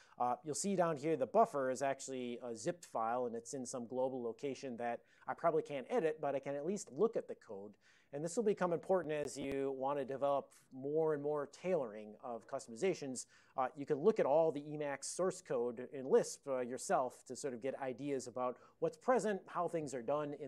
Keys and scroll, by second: 14.1 Up, 14.1 Up.